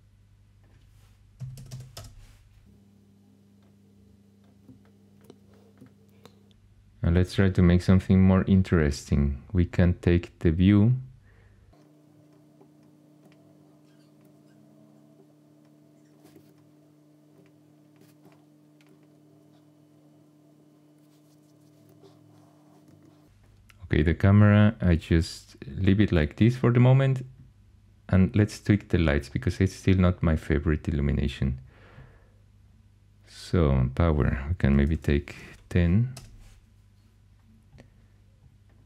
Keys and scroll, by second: 1.1-2.1 typing, 16.3 super+z, 22.9 typing, 34.4-35.6 typing, 36.1 Return.